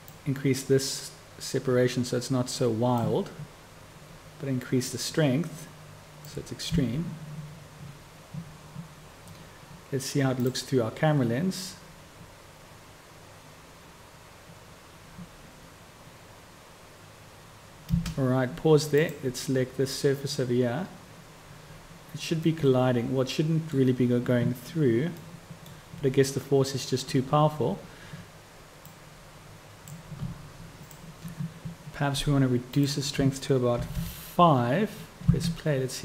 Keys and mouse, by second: 6.7 space, 18.0 space, 25.1-34.9 drag, 25.1-34.9 right drag, 34.9-36.0 middle drag, 35.2 space.